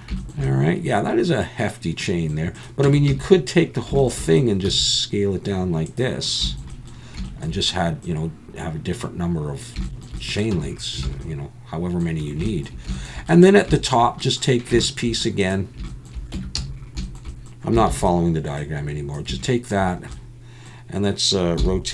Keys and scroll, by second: 2.9 Tab, 3.1 a, 4.7 s, 10.5 Tab, 11.1 alt+a, 16.3 Tab, 16.6 a, 17.9 shift+d, 21.6 r.